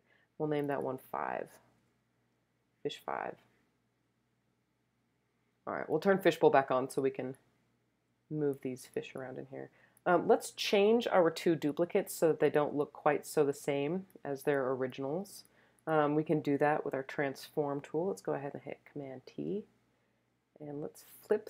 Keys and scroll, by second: 1.8 5, 19.2 super+t.